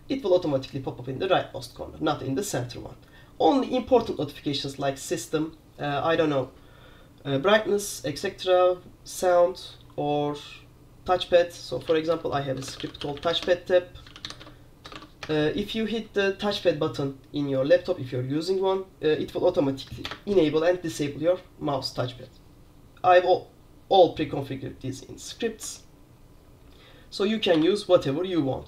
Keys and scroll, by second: 11.7-15.0 typing, 15.1 Tab, 15.3 Return, 19.9 Up, 20.2 Return, 27.6 super+q.